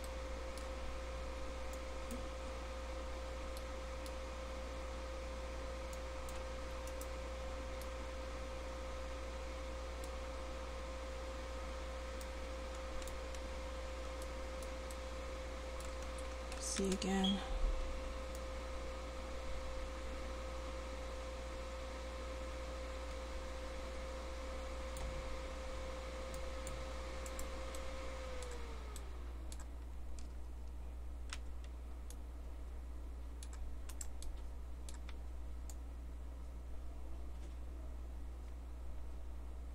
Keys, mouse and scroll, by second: 1.9-4.1 drag, 7.0 middle click, 7.4-8.8 middle drag, 13.6 right click, 16.8 c, 27.4-28.5 right drag, 28.5 middle click, 29.0 right click, 31.3 c, 34.0-36.0 right drag, 35.1 c.